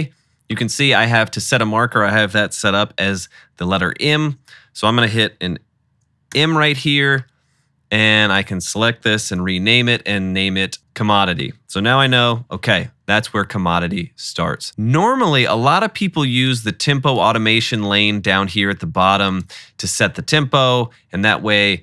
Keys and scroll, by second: 4.1 super+k, 6.4 m, 9.1 super+r, 10.8 Return, 12.0 -, 12.3 -.